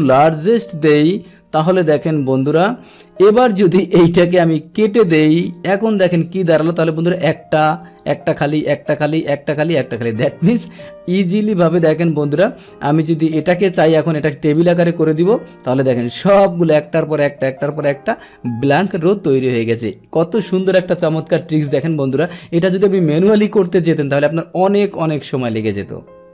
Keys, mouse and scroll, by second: 1.9 click, 4.1-5.0 right drag, 5.0 click, 5.4 click, 6.1 click, 6.8 click, 7.9 click, 8.4 click, 9.1 click, 9.5 click, 9.9 click, 10.5-11.6 scroll down 1, 11.6-12.7 scroll down 1, 12.7-14.5 drag, 15.1 click, 15.6-17.7 middle drag, 17.7 click, 18.9-23.5 middle drag, 23.5 click, 24.3-26.3 middle drag.